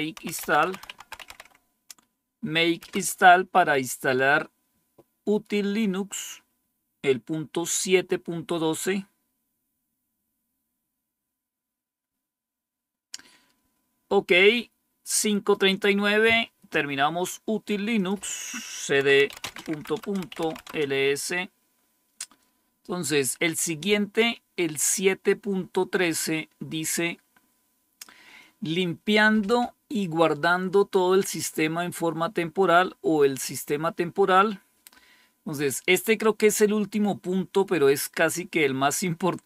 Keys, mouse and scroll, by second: 0.0-1.8 typing, 2.8 Return, 17.9-19.0 drag, 18.8-20.9 typing, 24.6 click, 27.2-37.0 scroll up 1, 37.0-39.3 scroll down 3, 39.3-39.4 scroll up 2.